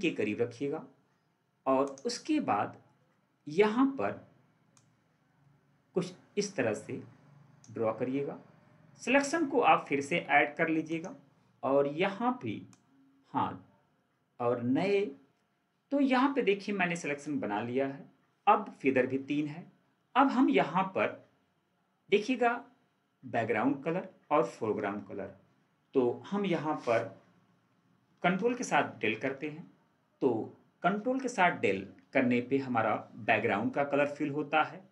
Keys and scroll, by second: 29.1 ctrl+Delete.